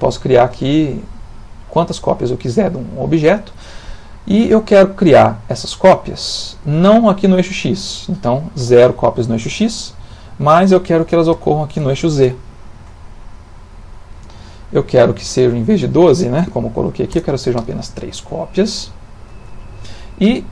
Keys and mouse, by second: 7.4 click, 10.3 Tab, 13.1 ctrl+middle click, 15.3 click.